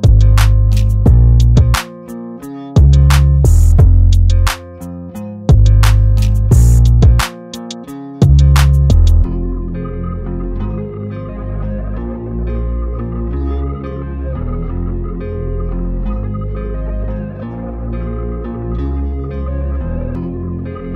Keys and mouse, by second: 3.4 click, 7.8 i, 8.7 click, 8.8 v, 10.1 click, 13.4 shift+Tab, 14.5 click, 20.2 click.